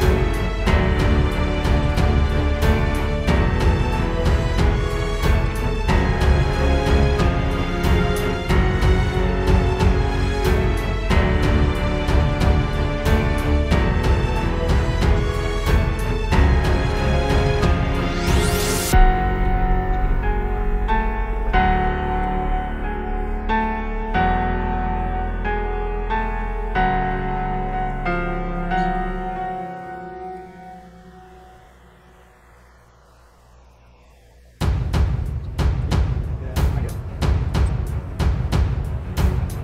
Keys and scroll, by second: 7.2 space, 8.3 space, 9.1 super+space, 15.3 space, 17.4 space, 17.8 space, 18.1 space, 19.3 space, 29.0 super+z, 32.3 space, 33.0 super+space.